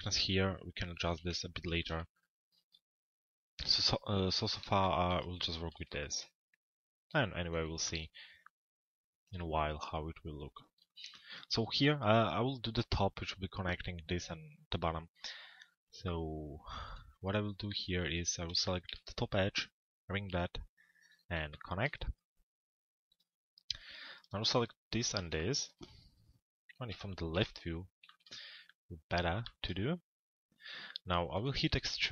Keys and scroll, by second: 0.8 p, 26.6 l, 27.3 z.